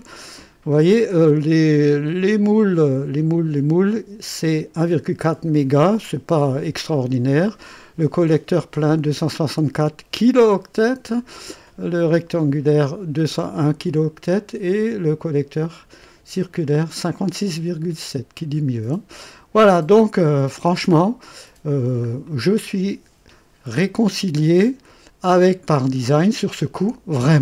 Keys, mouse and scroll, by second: 20.5 click, 21.7 scroll down 1, 22.2-22.9 right drag.